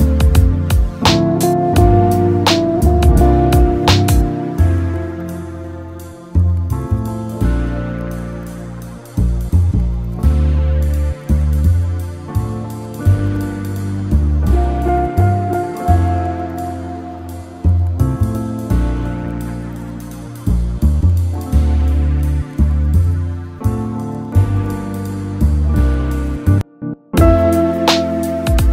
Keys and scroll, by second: 5.2 Delete.